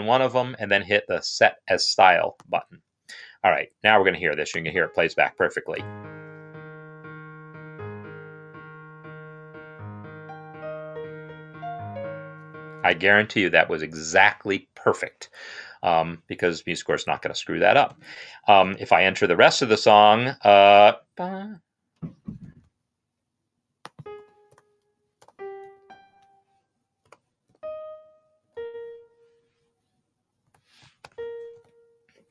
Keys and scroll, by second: 5.5 space, 12.7 space, 24.2 n, 25.4-27.3 typing, 28.3 typing, 30.2-30.9 typing.